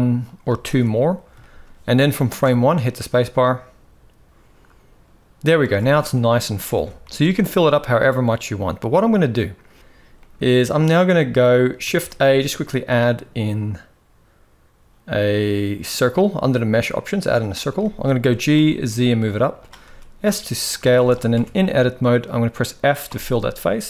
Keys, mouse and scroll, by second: 0.4 shift+r, 1.1 shift+middle drag, 2.0 space, 5.3 space, 6.0 shift+middle click, 6.5 alt+a, 6.8 z, 8.7-9.8 middle drag, 9.9-11.3 middle drag, 11.6 shift+a, 17.5 shift+middle drag, 17.9 g, 19.5 s, 20.7 shift+middle click, 21.1 Tab, 21.9 middle click, 22.8 f.